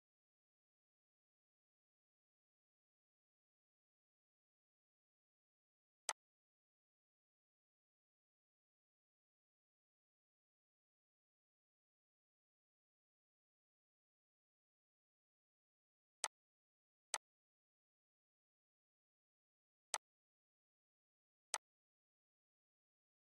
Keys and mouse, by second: 5.8 click, 10.7 Right, 15.8 click, 16.8 right click, 19.6 click, 23.1 Left.